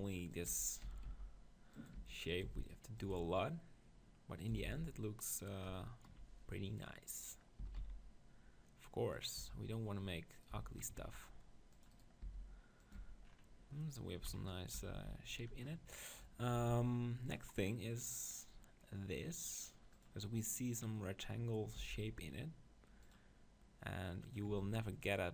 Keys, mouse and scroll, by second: 0.6 g, 2.1 g, 2.4 s, 3.1 g, 3.4 click, 4.5-5.8 drag, 4.6 s, 7.6 s, 9.2 middle click, 9.2-11.2 drag, 9.4 Tab, 10.3-12.2 middle drag, 10.3-12.2 right drag, 10.5 z, 11.2 ctrl+r, 12.2 s, 12.9 click, 12.9 right click, 13.0 Tab, 13.5 middle click, 14.5 KP_7, 14.8 Tab, 15.0 z, 16.1-17.7 middle drag, 16.6 ctrl+r, 17.7 click, 20.0-21.8 drag, 21.8 ctrl+r, 21.8 middle click, 24.3-25.3 drag, 24.7 ctrl+r.